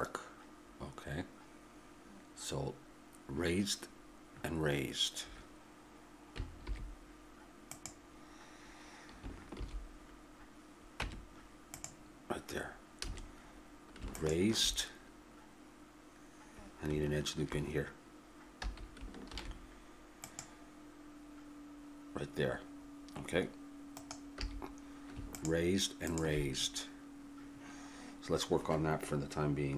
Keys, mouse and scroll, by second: 6.6 alt+h, 7.7-9.5 right drag, 9.5 shift+h, 11.0 Tab, 13.1 a, 18.6 a, 19.3 ctrl+r, 24.4 a, 25.3-29.7 drag.